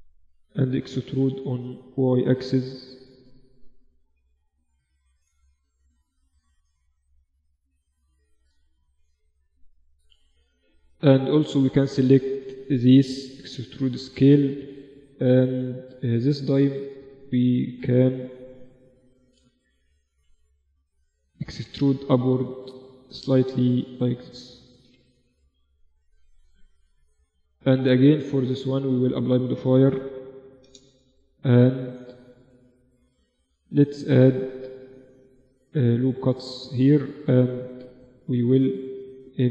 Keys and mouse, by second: 0.2 e, 2.5 z, 2.8 Tab, 3.7 KP_1, 4.4 z, 5.3 Tab, 5.6-6.8 middle drag, 6.0 z, 7.2 middle click, 7.4 z, 7.6 z, 8.4 z, 9.7-12.0 middle drag, 10.0 z, 12.9 e, 19.0 KP_7, 19.8 z, 20.8 e, 22.9 Tab, 23.6 z, 24.3 KP_1, 26.6-27.6 middle drag, 26.9 z, 28.2 middle click, 28.6-30.4 drag, 30.0 1, 31.3 Tab, 33.0 ctrl+r, 33.6-34.8 middle drag, 37.4-38.8 middle drag, 38.8-39.5 drag.